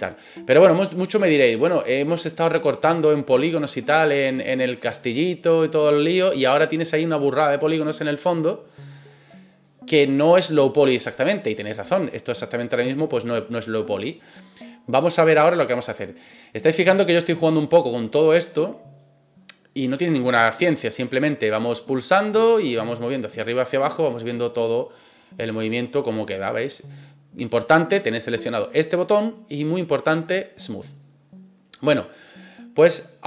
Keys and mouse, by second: 0.0 right click, 0.6-1.8 drag, 2.4 right click, 3.1-4.8 drag, 5.4 right click, 6.2-9.6 drag, 10.4 right click, 11.0-12.1 drag, 11.7 middle click, 15.4 right click, 16.5-17.5 drag, 18.4 right click, 18.9-20.5 drag, 22.1 right click, 22.6-25.0 drag, 25.4 right click, 26.0-27.5 drag, 29.8-31.0 drag, 32.8 click.